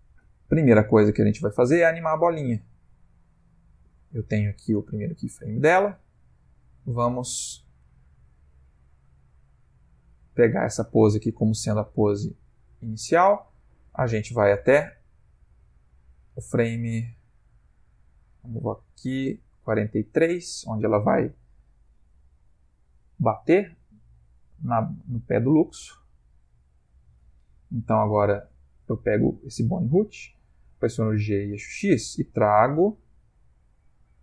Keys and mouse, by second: 2.9 click, 5.2 click, 17.2 Left, 17.6 Left, 18.0 Left, 18.3 Left, 18.8 Right, 22.2 Right, 22.8 Right, 23.2 Right, 23.7 Right, 23.9 Right, 24.2 Right, 24.4 Left, 24.7 Left, 25.0 Left, 25.3 Left, 25.6 Left, 26.0 Left, 26.4 Left, 26.8 Right, 31.4 g.